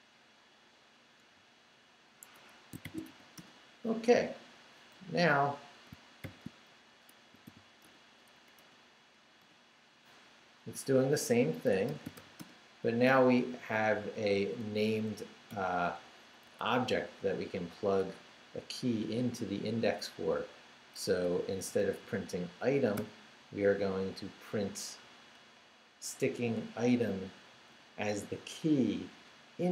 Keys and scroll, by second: 1.3 x, 2.3 Escape, 2.6-3.6 typing, 6.2 shift+;, 7.2 shift+s, 7.4 h, 7.8 Return, 8.3 Up, 9.4 Return, 11.4-12.6 typing, 13.4 Left, 14.3 alt+Left, 15.1 Left, 16.4 Down, 16.7 Left, 18.0 Left, 21.1 Down, 21.5 Right, 22.9 i, 27.2 Left.